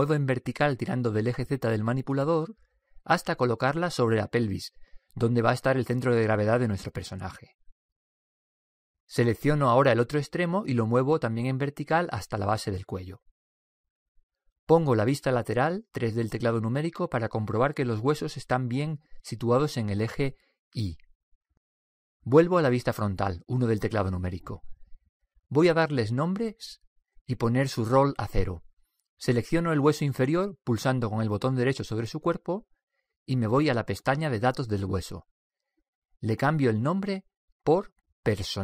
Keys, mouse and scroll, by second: 0.5-2.1 drag, 2.3 click, 4.8-7.0 middle drag, 10.7-13.6 right drag, 12.6-14.5 drag, 17.1 KP_3, 18.1 click, 23.4 KP_1, 30.9 right click, 33.0-36.3 drag, 36.9-38.5 drag.